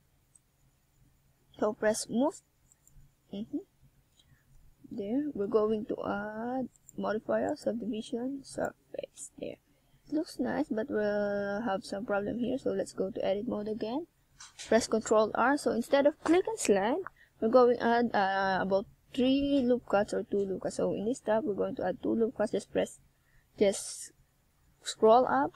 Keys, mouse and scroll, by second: 1.4 s, 2.5 click, 2.9 right click, 3.6 click, 6.1 right click, 6.7 shift+right click, 7.7 s, 8.6 click, 9.7 right click, 10.1 shift+right click, 10.6 right click, 11.0 s, 12.1 click, 12.5 click, 13.8 e, 15.2 click, 16.0 s, 17.5 click, 19.0 e, 19.7 click, 19.8 s, 21.8 click, 22.1-22.5 scroll down 3, 23.2 click, 23.2 s, 23.6 click, 24.1 click, 25.1 s.